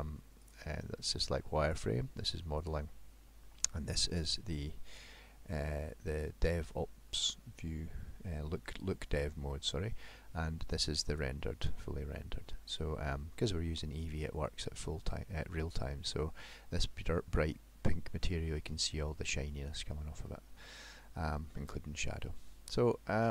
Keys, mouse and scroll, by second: 0.4 click, 1.7 click, 2.7 click, 11.3 click, 14.7 middle click, 17.7-18.1 scroll up 1, 18.3 middle click, 19.7 middle click, 21.5 middle click, 23.2 middle click.